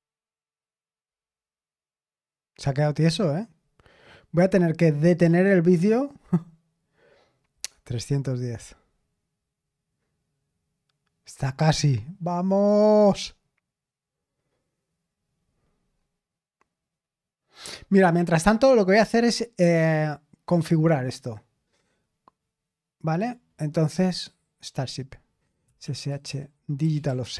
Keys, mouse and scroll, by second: 20.0 click, 23.1 click, 23.4 click, 25.5-27.3 typing.